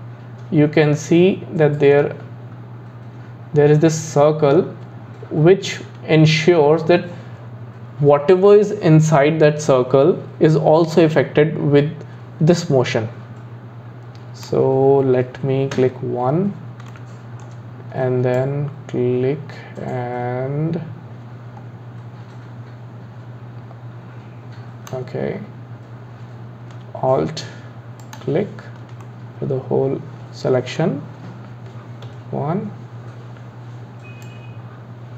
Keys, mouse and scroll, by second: 15.7 KP_1, 16.9-18.3 shift+middle drag, 18.3 click, 28.0 alt+click, 29.0-32.1 middle drag, 32.1 KP_1, 34.2 click.